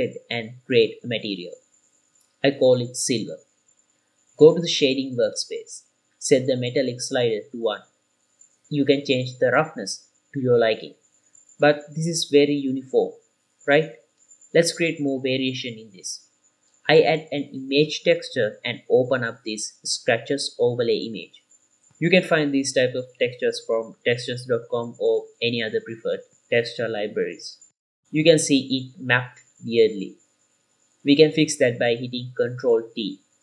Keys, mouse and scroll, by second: 1.4 click, 2.3 shift+click, 5.4 middle click, 5.4 scroll up 2, 5.7 click, 6.1 scroll up 1, 6.3 middle click, 6.6 scroll up 1, 7.0 click, 8.3 click, 9.2-11.0 middle drag, 11.7 click, 15.5-16.7 middle drag, 16.9 shift+a, 19.8 click, 23.5 click, 26.8 click, 28.1 ctrl+shift+click, 28.9-30.3 middle drag, 30.9 middle click, 31.4 middle click, 32.0 click, 32.9 ctrl+t.